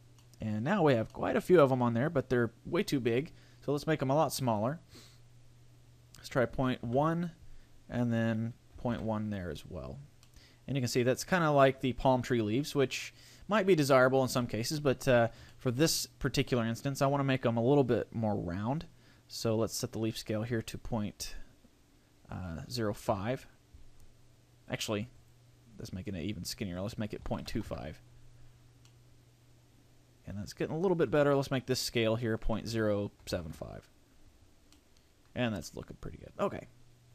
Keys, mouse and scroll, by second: 0.2 middle click, 0.8 scroll down 3, 1.1 middle click, 1.8-2.2 scroll up 2, 4.3 click, 8.0 click, 10.2 middle click, 14.9 scroll up 2, 15.5 shift+middle click, 15.8 middle click, 19.3 click, 25.2 click, 28.8 middle click, 31.4 click, 34.7 middle click, 35.3-35.6 scroll down 3, 35.6 middle click.